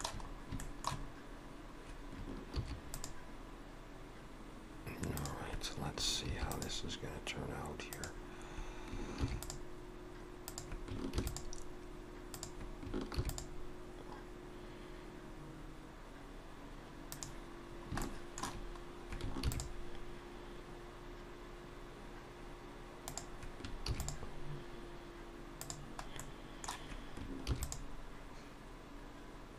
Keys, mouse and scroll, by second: 0.3 scroll up 2, 0.6 shift+middle click, 1.1 scroll up 2, 2.5 ctrl+r, 6.3 ctrl+r, 9.2 ctrl+r, 11.2 ctrl+r, 13.1 ctrl+r, 17.7 scroll down 2, 18.0 shift+middle click, 18.8 scroll down 1, 19.5 ctrl+r, 23.9 ctrl+r, 26.2 middle click, 27.5 ctrl+r.